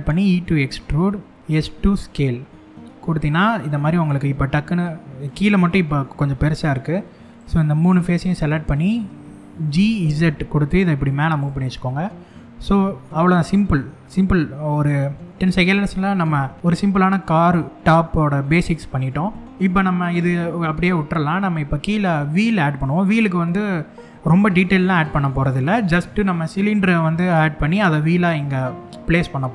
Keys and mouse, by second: 1.4 s, 2.9 click, 3.4-4.9 middle drag, 5.2 middle click, 6.0 middle click, 7.0 click, 7.8 shift+click, 8.4 shift+click, 9.3 g, 9.6 z, 11.0 click, 11.2 middle click, 12.3 middle click, 12.9 shift+middle click, 14.5 middle click, 16.5 middle click, 18.1 middle click, 24.4 shift+middle click.